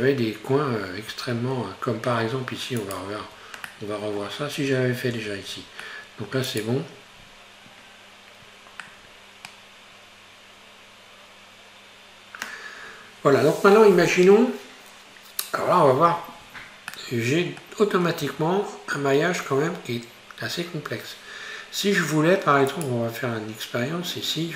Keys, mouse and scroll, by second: 1.1 Tab, 2.3 Tab, 2.9 right click, 3.3 Tab, 3.7 middle click, 4.7-5.2 scroll up 1, 5.2 Tab, 5.4-5.9 scroll down 4, 5.9 middle click, 6.5 right click, 7.3-7.7 scroll up 4, 8.9-11.8 middle drag, 12.1-12.7 scroll down 1, 17.0-18.3 middle drag, 18.3 Tab, 22.7 right click.